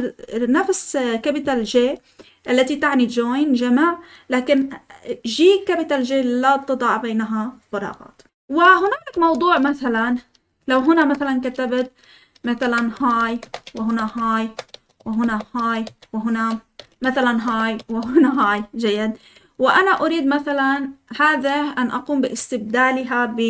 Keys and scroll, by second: 9.1 Escape, 9.5-17.7 typing, 14.3 Return, 15.2 Return, 17.4 Return, 18.4 Escape, 19.1-19.8 typing.